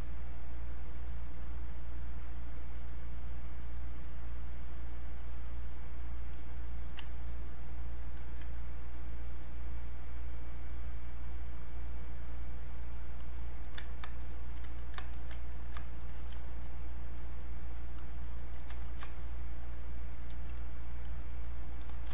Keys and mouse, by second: 2.2-8.2 drag, 9.8 click, 13.9 ctrl+click, 14.8 ctrl+click, 15.5 ctrl+right click, 16.1 ctrl+alt+click, 18.0 click, 19.2-21.0 drag, 21.9 alt+click.